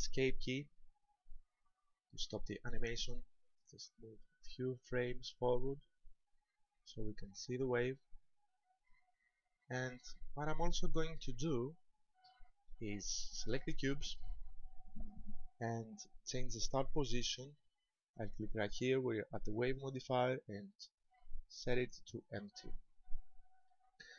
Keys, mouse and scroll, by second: 0.8 Escape, 3.9 click, 9.8 middle click, 11.7 scroll down 3, 12.3 shift+middle click, 12.8-13.2 scroll up 2, 13.9 right click, 19.8 click, 23.7 middle click.